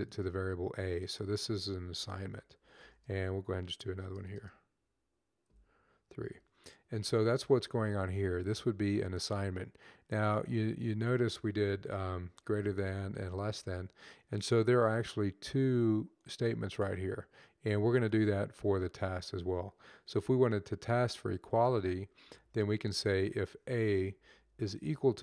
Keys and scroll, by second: 2.2-5.9 typing, 12.2 shift+., 15.0 typing, 21.4 typing, 22.0 Left, 22.3 Left, 23.3 a, 23.8 Right, 24.1 Right, 24.3 Right, 24.5 Right, 24.6 Right.